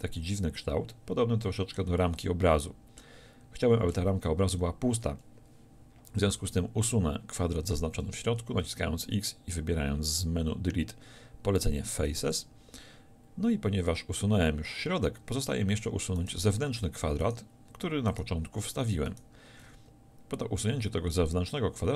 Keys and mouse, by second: 4.0 z, 6.4 z, 8.0 x.